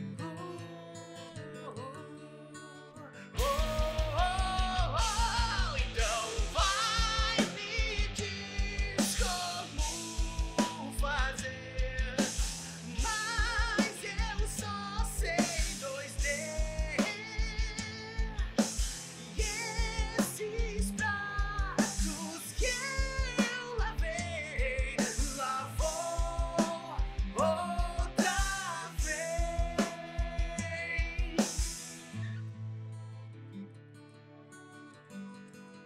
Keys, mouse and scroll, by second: 0.0-0.5 typing, 0.1 middle click, 0.7 middle click, 1.3 middle click, 1.3 click, 1.4 middle click, 1.7 middle click, 1.7 r, 2.5 middle click, 2.8 scroll down 6, 3.0 middle click, 3.6 shift+middle click, 4.8 middle click, 5.0 shift+middle click, 5.1 scroll up 2, 6.4 KP_3, 6.8 click, 7.0 r, 7.5 g, 7.9 middle click, 8.3-8.7 scroll up 3, 8.6 click, 8.8 middle click, 9.3 r, 9.8 middle click, 10.1 KP_1, 10.2 KP_Decimal, 10.4 scroll down 3, 10.5 middle click, 11.0 middle click, 11.2 r, 11.6 click, 11.7 middle click, 11.9 r, 12.2 middle click, 12.4-13.0 scroll down 5, 12.5 middle click, 12.7 shift+middle click, 13.1 middle click, 13.5 click, 13.8 KP_1, 14.4 scroll down 1, 19.2 click, 19.8 shift+`, 24.6 click, 25.5 click, 25.8 g, 26.8 shift+middle click, 26.8-27.7 scroll up 5, 27.0 g, 28.5 click, 28.5 g, 34.0 shift+middle click, 34.6 middle click, 35.3 click, 35.5 middle click.